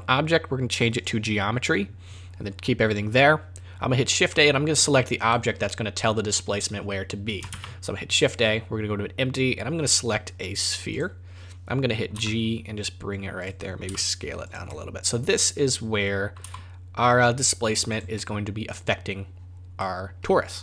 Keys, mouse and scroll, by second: 4.3 middle click, 5.0-7.3 scroll down 2, 5.3 middle click, 7.5 shift+a, 12.1 g, 13.8 s, 14.7 middle click, 16.4 g, 18.1 middle click, 19.8 middle click.